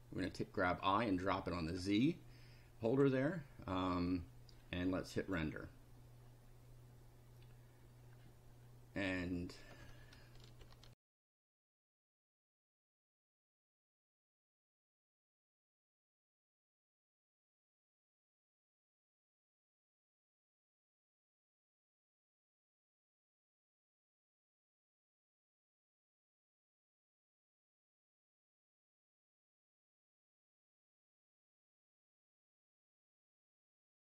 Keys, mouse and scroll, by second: 0.3-1.9 drag, 2.9 click, 5.2 click, 10.9 ctrl+r, 13.8 click, 15.1-16.3 typing, 17.6 click, 21.7 click, 27.1-28.4 drag, 33.2 click.